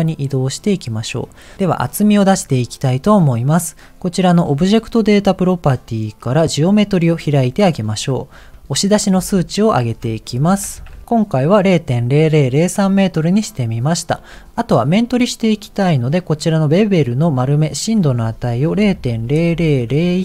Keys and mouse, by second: 1.6 middle click, 5.2 click, 8.5 ctrl+z, 9.9-11.0 drag, 17.8-20.2 drag, 19.5 KP_0.